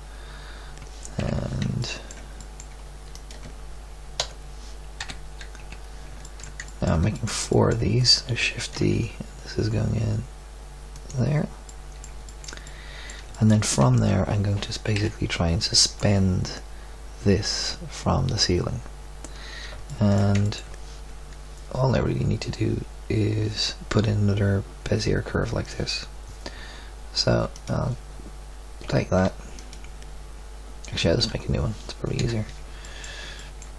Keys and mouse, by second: 1.1 KP_3, 4.1 l, 5.0 KP_2, 5.5 KP_3, 8.7 shift+d, 10.4-11.7 middle drag, 13.0 middle click, 13.9 Tab, 14.9 KP_1, 15.7 middle click, 18.1-18.5 middle drag, 27.5-28.8 right drag, 28.8 Tab, 31.2 Tab, 32.1 KP_7, 32.8 middle drag.